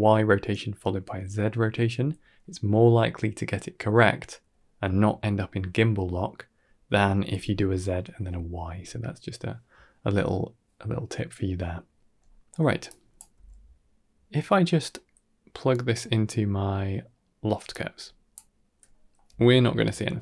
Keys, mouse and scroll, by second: 12.0-12.4 scroll down 3, 12.4 middle click, 12.7-13.1 drag, 13.2 g, 14.2 click, 14.2 middle click, 14.2 a, 14.2 g, 14.6 scroll down 1, 14.8 middle click, 15.9 middle click, 17.5 click, 17.8 click, 18.8 middle click.